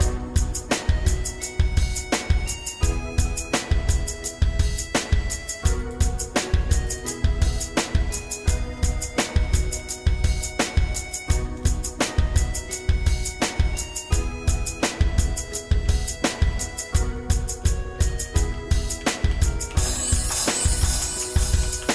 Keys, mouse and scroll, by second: 1.4 Tab, 1.4-4.8 shift+middle drag, 5.0 z, 6.9 click, 7.5 Tab, 8.4 shift+middle click, 9.4 g, 11.7-13.9 shift+middle drag, 14.8 ctrl+z, 15.9 ctrl+z, 16.3 ctrl+z, 17.2 shift+middle click, 18.1 ctrl+z, 18.5 ctrl+z, 19.1 ctrl+z, 19.3 ctrl+z, 19.8 ctrl+z, 20.0 ctrl+z, 20.2 ctrl+z, 20.4 ctrl+z, 21.3 ctrl+z.